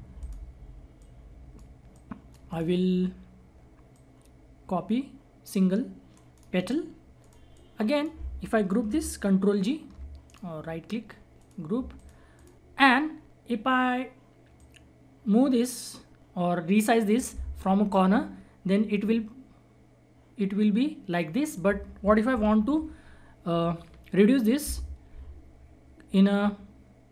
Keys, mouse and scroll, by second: 0.1-2.4 drag, 3.1-3.9 scroll up 1, 3.9-6.1 drag, 6.1 right click, 6.7-7.1 scroll down 1, 7.1-10.2 drag, 10.2 right click, 11.3 click, 12.7 scroll up 1, 14.6-22.3 drag, 22.3 ctrl+z.